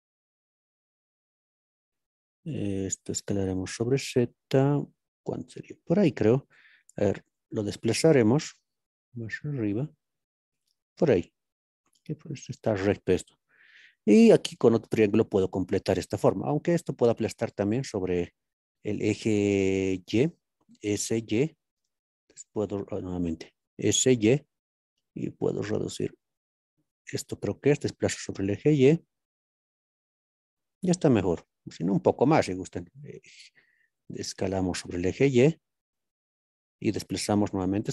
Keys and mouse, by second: 0.2 ctrl+z, 2.2 s, 2.5 z, 5.9 click, 8.2 z, 10.6 click, 21.3 y, 23.5 s, 23.5 y, 23.9 y, 26.9-28.0 drag, 28.0 g, 28.0 y, 30.4 click, 34.4 s, 34.9 y, 36.5 click, 37.8 y, 37.8 g.